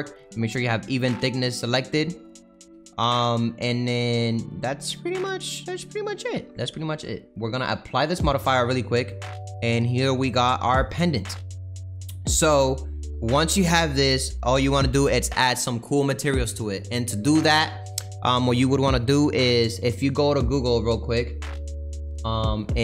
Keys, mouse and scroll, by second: 0.7-2.6 drag, 2.6 middle click, 2.9 scroll down 1, 3.1-4.9 middle drag, 4.9-8.8 drag, 8.8 middle click, 9.6 scroll down 1, 9.7-11.1 middle drag, 11.1-12.1 scroll down 6, 12.1-14.5 middle drag, 14.5-18.6 scroll up 2, 18.6 click, 22.6 click.